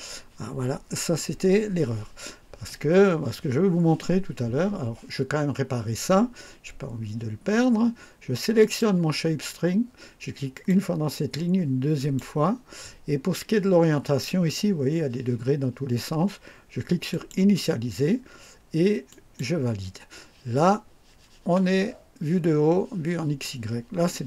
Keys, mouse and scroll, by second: 8.6 click, 10.5 click, 12.0 click, 17.1 click, 19.1 click.